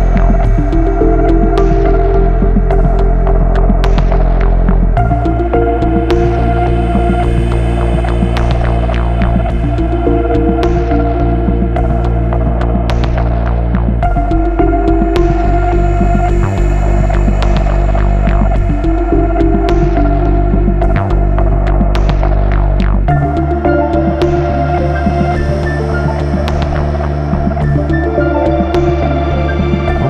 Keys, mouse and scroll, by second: 0.1-0.5 scroll up 1, 2.1 ctrl+click, 3.9-4.2 scroll down 1, 5.5 ctrl+click, 6.7 click, 7.7 click, 8.1 scroll down 1, 9.9 scroll down 1, 10.3 F9, 13.7 click, 14.2 ctrl+click, 15.2 click, 16.2 click, 18.7 click, 21.3 click, 22.4 ctrl+z, 24.0 click, 25.2 click, 26.6 click, 28.0 click.